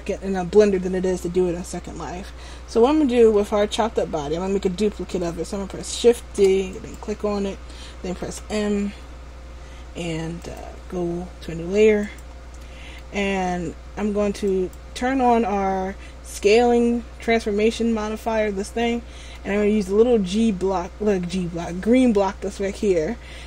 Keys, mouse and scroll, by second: 6.3 shift+d, 8.4 m, 12.1 click, 12.7 middle click, 14.6 click, 18.9 middle click, 22.9 click.